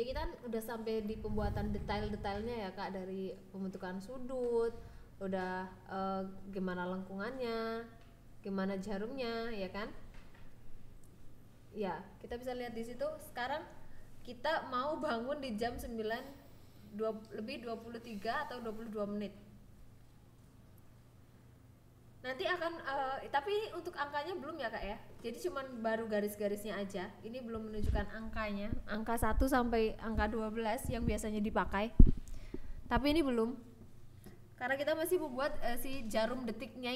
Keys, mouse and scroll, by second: 0.4 click, 1.3 s, 2.0 click, 2.4 g, 2.6 z, 3.4 click, 4.5 e, 4.7 z, 5.9 click, 6.2 Tab, 7.0 click, 7.6 click, 8.2-9.4 drag, 10.1 Tab, 10.9 ctrl+r, 12.5 click, 13.1 ctrl+r, 13.6 click, 14.2 ctrl+b, 15.3 click, 16.2 click, 16.4 click, 16.6 click, 16.9 click, 17.3 Tab, 18.5 click, 19.4 click, 20.0 click, 20.2 Tab, 21.3 click, 22.0 ctrl+b, 22.2 v, 23.4 click, 24.2 click, 25.2 click, 26.0 click, 26.7 Tab, 28.2 click, 29.0 click, 29.5 click, 30.1 click, 30.9 Tab, 31.3 alt+z, 31.8 alt+z, 32.8 ctrl+r, 34.0 click, 34.3 Tab, 34.8 click, 35.6 ctrl+s, 36.4 click.